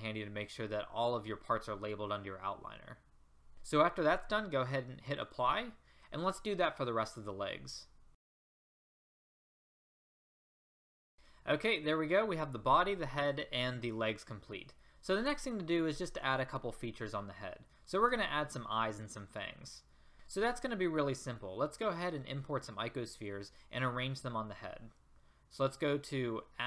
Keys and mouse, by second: 9.2 click, 10.1 click, 10.4 click, 10.7 click, 10.9 click, 11.0 a.